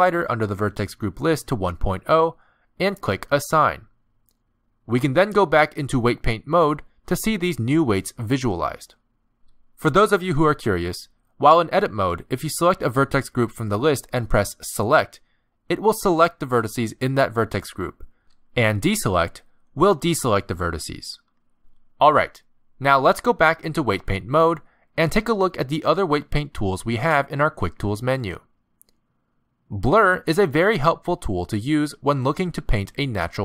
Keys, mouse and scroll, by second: 0.3 click, 3.9 click, 5.3 middle click, 6.4 Tab, 8.0 z, 8.9 middle click, 12.9 Tab, 14.2 middle click, 14.5 click, 14.6 alt+a, 15.7 click, 16.6 middle click, 17.2 click, 18.0 click, 18.7 middle click, 20.1 click, 20.8 click, 21.9 click, 22.7 middle click, 23.9 Tab, 30.9 click, 32.3 middle click.